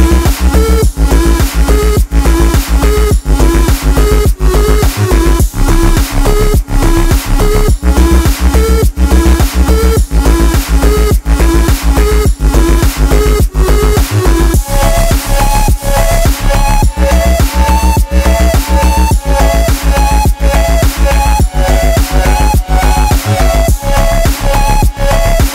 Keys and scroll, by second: 3.6 ctrl++, 4.2 ctrl+-, 11.8 Return, 12.7 ctrl+t, 25.3 Return.